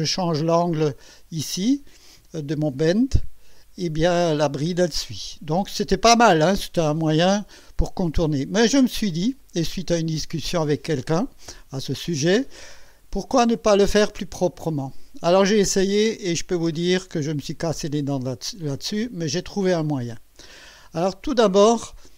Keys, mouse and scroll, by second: 3.2 click, 9.3 click, 13.3-15.3 drag, 18.3 click, 20.1 scroll down 1.